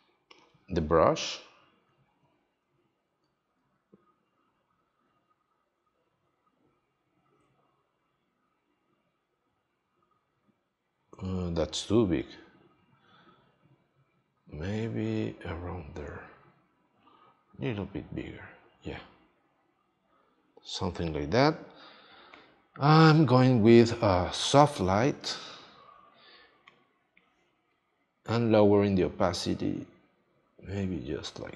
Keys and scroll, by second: 3.0 x.